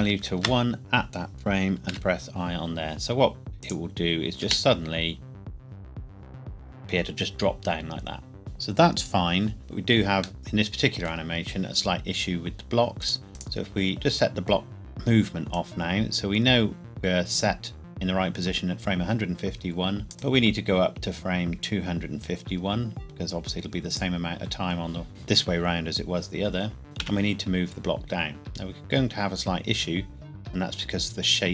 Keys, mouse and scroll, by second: 0.0 KP_1, 0.4 KP_Enter, 1.9 i, 3.6 click, 4.4 space, 8.4 ctrl+s, 9.5-10.4 scroll down 1, 10.4 middle click, 13.0 click, 15.5 click, 15.8 click, 20.5 click, 26.8 g, 27.0 z.